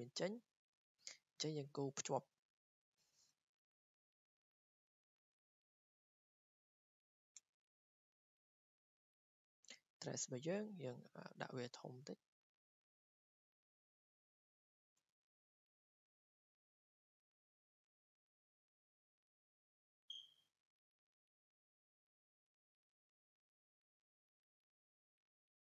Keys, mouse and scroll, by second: 1.1 scroll down 2, 2.3 scroll down 1, 3.0 click, 4.1 scroll, 4.9 click, 9.1 click, 11.6-14.6 drag, 14.9 1, 16.2 click, 17.1 Escape, 19.3 click, 20.5 click, 22.6 scroll down 4, 23.6 scroll, 23.7 click, 24.6 click.